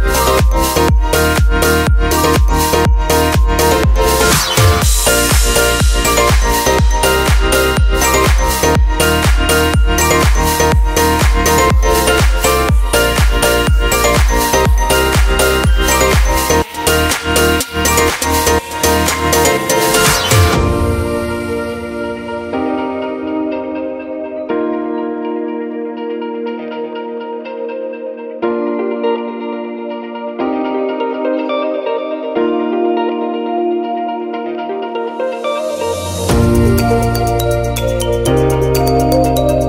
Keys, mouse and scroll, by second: 10.5-11.4 scroll up 4, 10.8 middle click, 13.7 click, 26.9 scroll up 2, 27.2 shift+middle click, 27.6 scroll up 1, 27.9 shift+middle click, 28.9 click, 34.4 click.